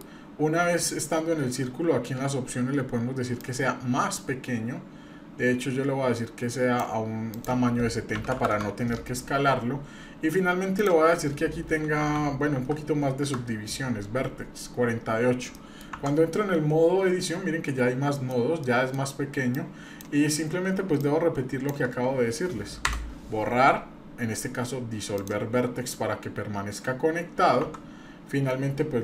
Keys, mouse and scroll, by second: 0.1-0.6 scroll up 2, 0.6 scroll down 2, 3.4-6.8 drag, 7.3-8.8 drag, 10.8-13.5 drag, 15.5 middle click, 15.9 Tab, 16.5-16.9 scroll up 1, 16.9 scroll down 1, 17.0-17.4 scroll down 1, 18.1 middle click, 18.6 middle click, 19.0 scroll down 1, 19.5 click, 20.3-20.6 scroll up 1, 21.0 shift+click, 22.8 Delete, 25.6-26.0 scroll up 3, 26.0-26.6 scroll down 2, 26.8-27.4 scroll up 1, 27.6 Tab.